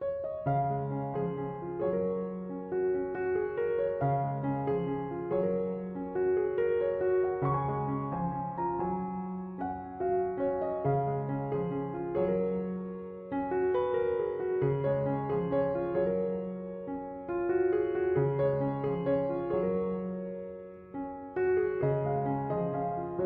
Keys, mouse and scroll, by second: 1.3 1, 1.5 5, 1.7 Return, 15.1 m, 15.3 o, 15.6 v, 15.8 e, 21.9 2, 22.1 ., 22.4 5, 22.6 Return.